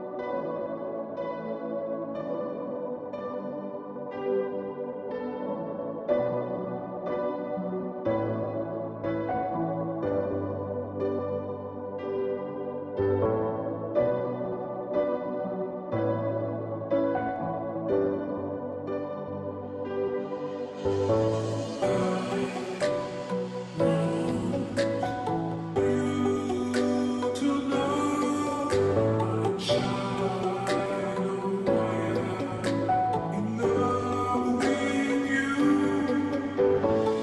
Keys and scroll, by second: 0.0-37.2 typing, 2.1 ctrl+j, 15.8 ctrl+z, 23.4-24.8 Left, 26.4 Right.